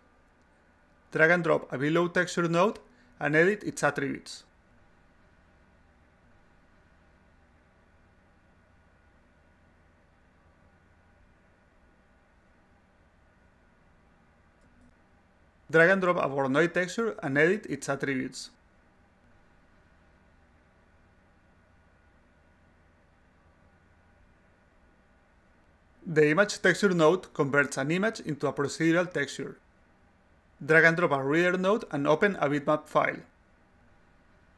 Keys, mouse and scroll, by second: 0.7-2.5 drag, 4.2 click, 4.9-5.9 drag, 6.3-7.5 drag, 7.9 click, 9.9 4, 10.4-14.2 drag, 15.3 click, 16.6-18.3 drag, 19.7 click, 20.5 5, 21.7-25.5 drag, 31.4 click, 32.0-33.0 drag, 33.6-34.5 drag.